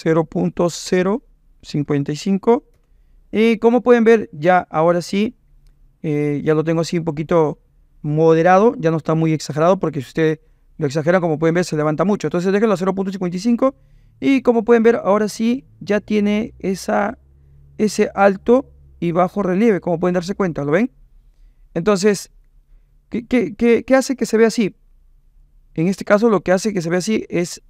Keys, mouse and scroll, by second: 1.9 KP_5, 10.5-11.8 right drag, 14.6-17.1 middle drag, 17.1-20.5 drag, 20.5 middle click, 20.8-24.4 right drag, 26.1 right click, 26.5 click.